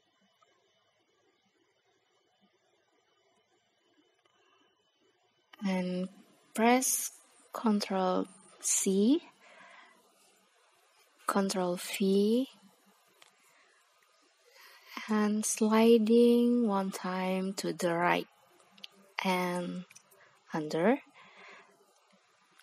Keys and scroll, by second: 3.6 ctrl+c, 8.6 ctrl+v.